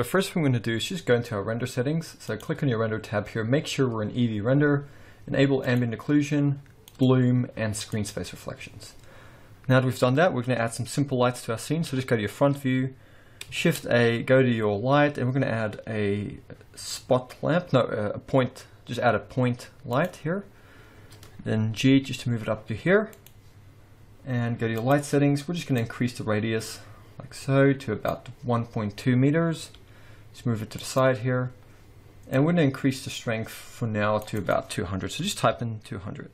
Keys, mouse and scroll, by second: 2.2 click, 5.6 click, 6.8 click, 7.9 click, 9.3-10.1 scroll down 1, 10.1-11.0 scroll down 3, 11.8 KP_1, 12.5-13.3 scroll up 2, 13.3 scroll up 4, 13.6 shift+a, 20.3-20.9 scroll up 1, 20.9-21.3 scroll up 2, 21.3-21.9 scroll down 1, 21.9 g, 24.8 click, 25.8 click, 29.3-29.7 scroll down 1, 29.7 g, 32.3 click, 34.3 click.